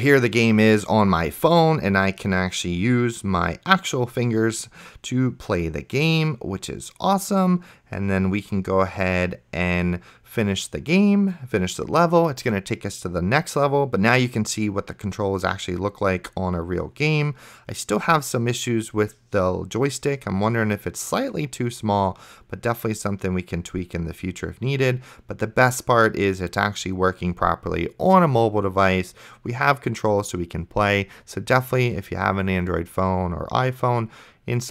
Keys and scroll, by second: 31.0 a, 31.4 space, 32.9-34.7 typing.